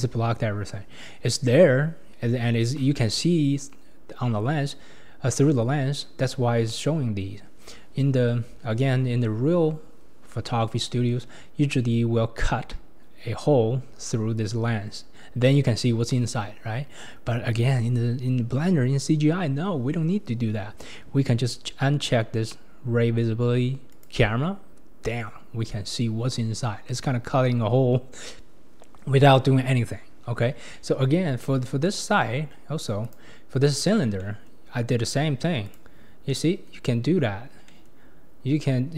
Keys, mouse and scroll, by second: 0.1-1.2 scroll up 2, 1.2 scroll up 1, 1.5-2.1 scroll down 3, 2.1-5.2 scroll down 3, 5.5-6.3 scroll up 1, 19.6-20.5 scroll up 2, 23.9 click, 30.2-30.7 scroll down 8, 30.7-31.3 middle drag, 31.3-31.9 scroll down 8, 31.9-32.5 middle drag, 32.5-33.0 scroll down 3, 33.0 click, 33.8-34.2 scroll down 3, 34.2-35.7 middle drag, 35.7 click, 36.3 scroll up 1, 36.3-37.0 middle drag, 37.0-37.7 scroll up 4, 37.7 scroll up 1, 37.7-38.9 middle drag.